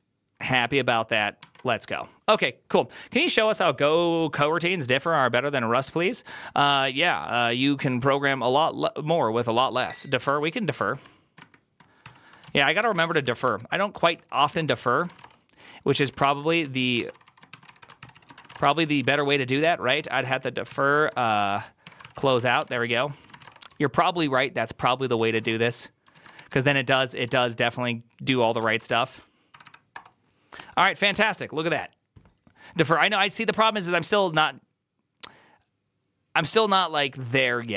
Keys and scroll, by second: 0.0-0.1 typing, 11.2 ctrl+^, 11.9 ctrl+c, 12.4 alt+{, 12.6-24.1 typing, 13.9 ctrl+c, 14.0 ctrl+c, 14.2 ctrl+a, 14.5 ctrl+c, 14.9 ctrl+:, 15.1 Return, 24.7 ctrl+d, 24.9 ctrl+c, 25.1 ctrl+c, 25.2 ctrl+:, 25.3-28.4 typing, 25.3 ctrl+:, 25.3 Return, 26.0 ctrl+a, 28.2 ctrl+a, 28.5 ctrl+c, 28.7 Up, 29.4 Up, 29.4 Return, 29.5 Up, 29.8 ctrl+a, 29.8 Return.